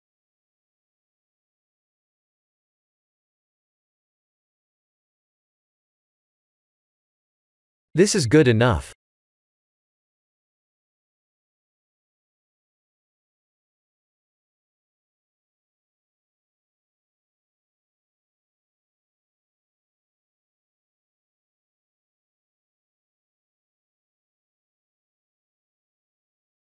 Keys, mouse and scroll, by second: 1.0 click, 1.5 click, 2.9 click, 3.5 click, 6.2 click, 7.0 click, 9.3-9.9 scroll up 3, 10.7-11.3 scroll down 2, 12.2 click, 20.8 click, 24.9 click, 25.5 scroll up 4, 26.5 click.